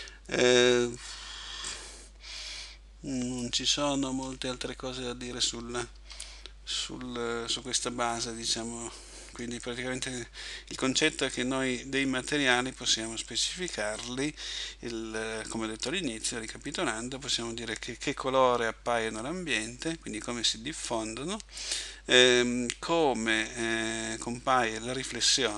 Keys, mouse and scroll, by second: 6.0 Escape, 6.8-7.6 scroll down 2, 8.2 middle click.